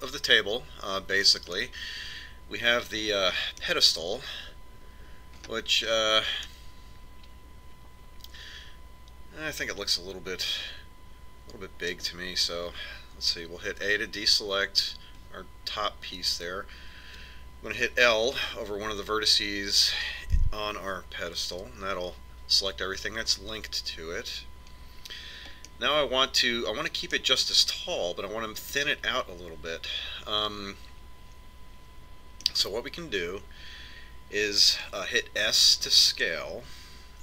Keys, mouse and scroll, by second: 1.7-3.4 middle drag, 5.5-8.2 middle drag, 8.3 middle click, 13.8 a, 18.6-21.7 middle drag, 21.7 l, 25.9-27.7 middle drag, 28.9-30.9 middle drag, 35.7 s.